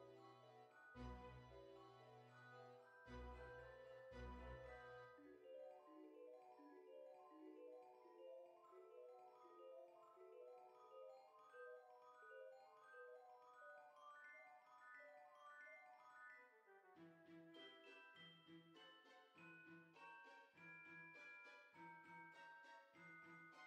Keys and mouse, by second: 0.2 click, 4.2 click, 4.7 KP_0, 4.9 KP_Decimal, 5.2 KP_Enter, 5.2 Return, 5.8 click, 5.9 KP_0, 6.2 KP_Decimal, 6.3 KP_2, 7.7 click, 8.3 KP_0, 8.5 KP_Decimal, 8.8 KP_4, 9.5 click, 10.8 click, 12.5 click, 14.5 click, 17.9 click, 18.3-20.4 typing, 19.3 click, 21.3 click, 22.4 shift+middle click.